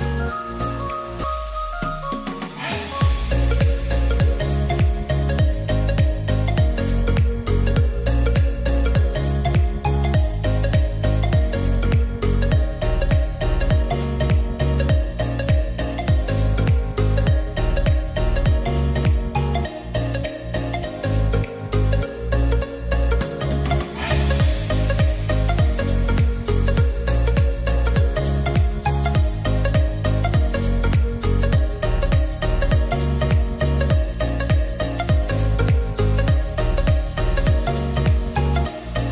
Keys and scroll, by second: 0.4-3.5 typing, 1.6 Return, 6.4-7.4 typing.